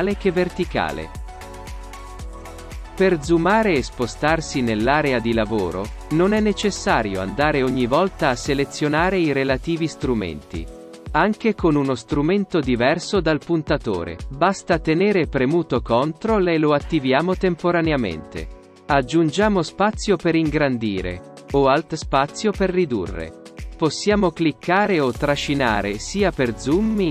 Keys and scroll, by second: 7.8 ctrl+space, 24.6 ctrl+alt+shift+space.